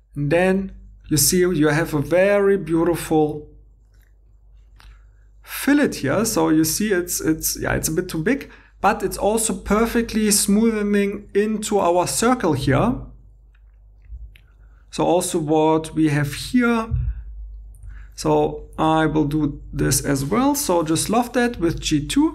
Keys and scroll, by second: 12.7 alt+Tab, 17.7 shift+e, 18.9 2, 20.7 i, 21.3 Tab.